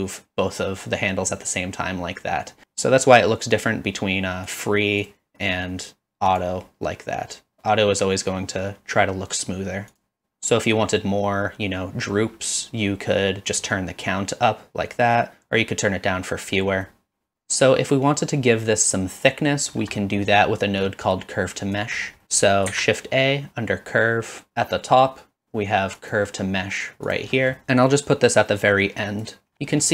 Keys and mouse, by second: 3.6-4.6 drag, 5.1-6.4 drag, 9.9 click, 13.9-16.4 shift+drag, 16.9 middle click, 20.1 middle click, 20.8 click, 22.7 shift+a, 27.8 middle click, 28.3 click.